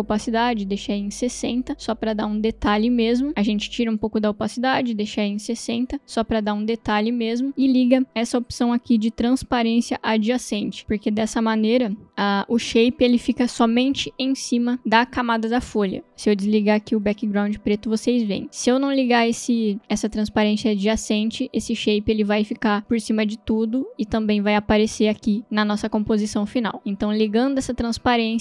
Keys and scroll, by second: 0.2-1.1 typing, 4.8 0, 5.1 Return.